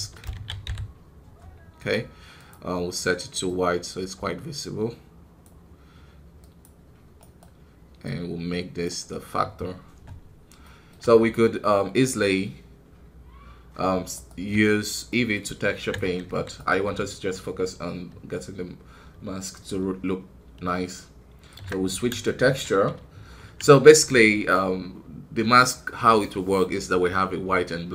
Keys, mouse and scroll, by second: 7.3 right click, 8.8-10.5 drag, 10.5-15.8 middle drag, 15.8 z, 16.2 KP_1, 16.5-21.6 right drag, 22.2-27.9 shift+middle drag.